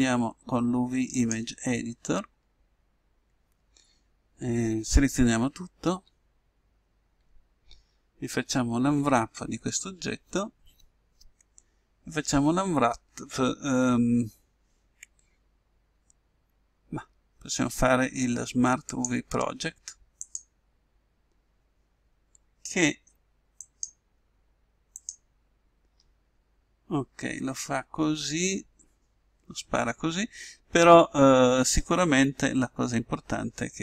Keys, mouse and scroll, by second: 5.3 a, 5.9 a, 8.9 u, 23.6-25.3 drag, 26.6-31.8 middle drag.